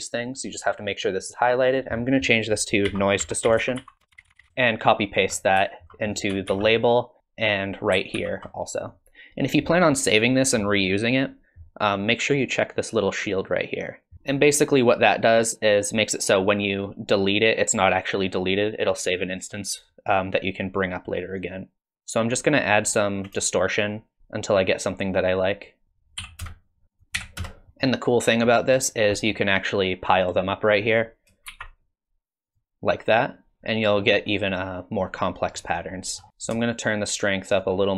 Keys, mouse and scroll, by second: 0.3 click, 1.6 click, 6.0 click, 7.4 click, 13.7 click, 16.7 click, 19.5 click, 21.8 middle click, 21.8-22.3 scroll up 2, 22.8-23.5 scroll up 2, 23.5 shift+click, 25.8 click, 26.9 click, 27.7 middle click, 27.7 scroll down 8, 28.5 middle click, 28.9 scroll down 2, 29.2 middle click, 30.9 click, 31.5 shift+d, 34.0-34.5 scroll up 5, 34.4 middle click, 35.5 middle click, 36.2 scroll up 1, 36.3 middle click, 36.6 shift+click.